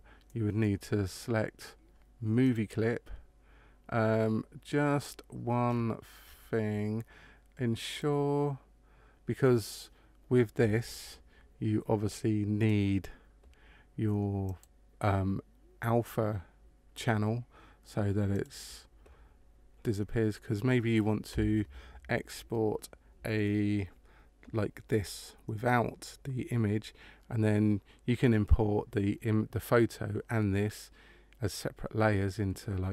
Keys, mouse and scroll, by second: 1.5-2.4 scroll down 1, 2.4 click, 2.4-4.6 scroll down 1, 5.6 scroll down 3, 5.6 scroll up 1, 5.7-7.8 scroll down 6, 7.8 click, 14.4 click, 18.3 click.